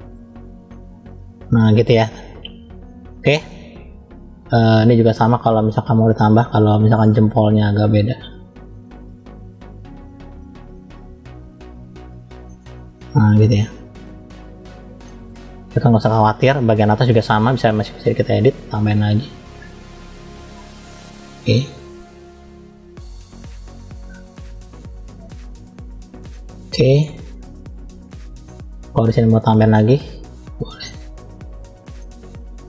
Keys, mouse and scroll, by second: 0.6 middle click, 1.5 middle click, 2.7 middle click, 3.7-4.1 scroll down 2, 4.1 middle click, 5.3 middle click, 5.6 scroll up 2, 6.2 shift+middle click, 7.0 scroll up 1, 7.6 click, 9.4 click, 12.5 middle click, 13.7 click, 15.0 middle click, 16.0 shift+middle click, 16.0-16.4 scroll down 2, 16.7-17.4 scroll up 2, 17.4 middle click, 17.4 scroll up 2, 18.6 click, 21.4 middle click, 22.5 click, 24.5 click, 25.7 click, 26.2 middle click, 27.3 click, 28.4 middle click, 29.5 click, 31.1 click, 32.0 middle click.